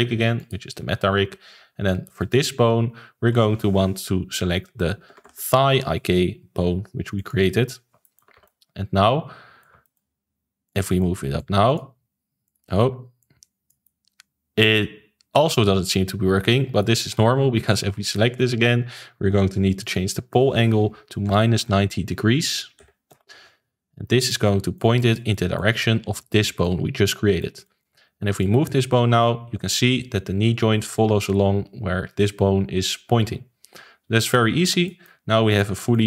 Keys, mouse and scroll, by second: 2.1-5.3 drag, 8.0-8.3 shift+middle drag, 8.3 ctrl+s, 8.4-10.6 middle drag, 10.6 click, 10.8-11.3 middle drag, 11.3 click, 12.4 click, 13.2 click, 13.8-17.6 middle drag, 17.6 click, 19.8-23.0 drag, 24.2-26.1 middle drag, 26.1 click, 26.6-28.4 middle drag, 28.4 click, 34.6 alt+g, 34.8-35.4 middle drag, 35.4 click, 35.7-36.0 middle drag.